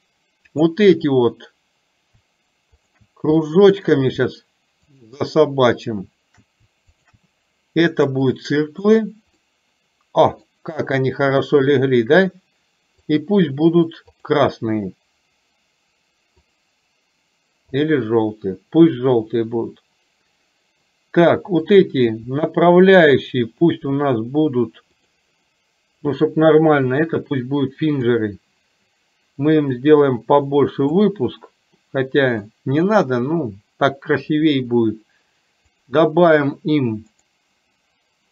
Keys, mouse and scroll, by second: 0.5 click, 3.4 middle click, 4.9 shift+click, 7.0 shift+click, 8.2 click, 9.4-10.5 scroll up 1, 14.2 click, 21.7 click, 25.0-27.2 drag, 28.0 click, 29.8-31.0 drag, 31.9-32.5 middle drag, 35.8 click, 37.2-38.3 drag.